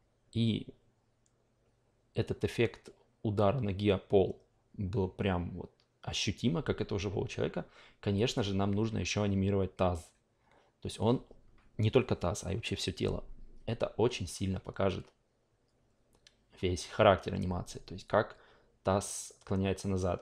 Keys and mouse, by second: 8.1 drag.